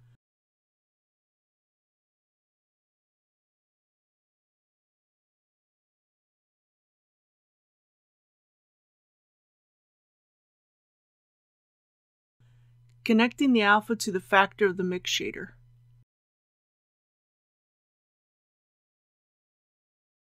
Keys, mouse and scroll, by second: 1.9 click, 7.9-8.4 typing, 10.0-15.2 drag.